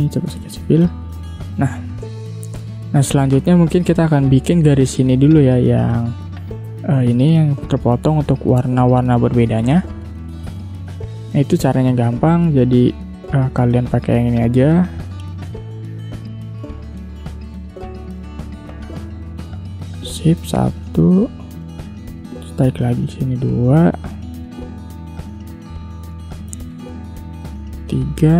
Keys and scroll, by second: 1.6 space, 7.3 ctrl+z, 11.9 ctrl+0.